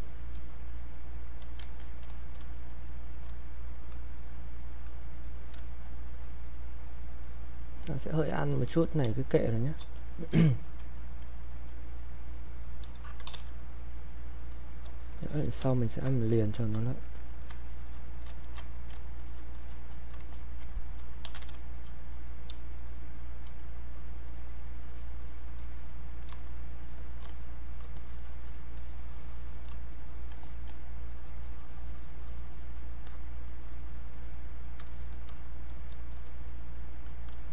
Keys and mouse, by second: 2.7 shift+click, 6.1-7.8 drag, 9.1 space, 9.5 click, 9.6 space, 10.6 alt+click, 12.9-13.7 typing, 13.7 click, 15.3 alt+click, 15.8 ctrl+right click, 16.3 alt+click, 16.9 ctrl+right click, 17.7 shift+click, 18.8 alt+click, 21.0-23.0 typing, 21.8 click, 22.9 click, 23.6-26.5 drag, 26.5-28.0 shift+drag, 28.0-36.3 shift+drag, 36.3 click, 37.4 shift+click.